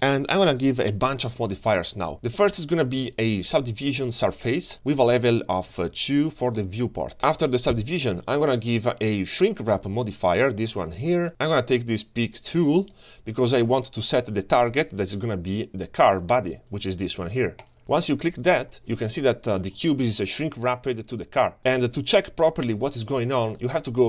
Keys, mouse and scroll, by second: 2.1-4.7 drag, 6.6 click, 8.8-11.3 drag, 12.9 click, 18.0 middle drag, 18.5 middle click, 18.9-19.2 scroll up 3, 19.2-19.8 scroll down 2, 19.8-20.2 middle drag.